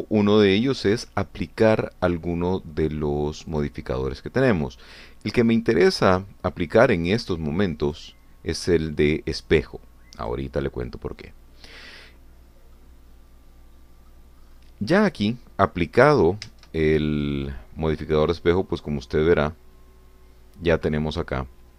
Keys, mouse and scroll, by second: 4.5 click, 6.9 click, 8.9 click, 11.2 click, 12.4-12.8 scroll down 2, 13.5 scroll down 2, 13.8-15.3 drag, 15.4-15.8 scroll up 2, 17.9 Tab, 18.3-21.7 drag.